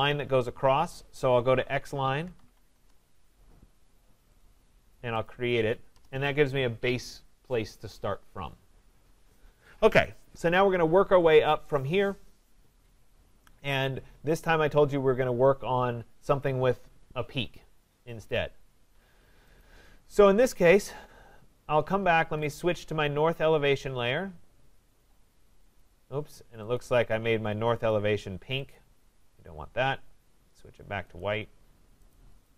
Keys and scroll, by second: 2.7 Return, 22.0 Escape.